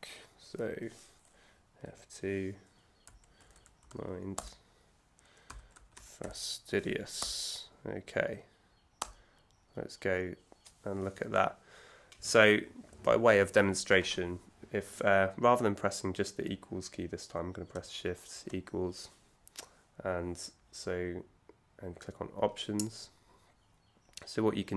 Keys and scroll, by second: 1.9 F2, 2.8-4.0 typing, 4.3 Return, 5.2-6.4 typing, 7.2 Return, 18.1 shift+=.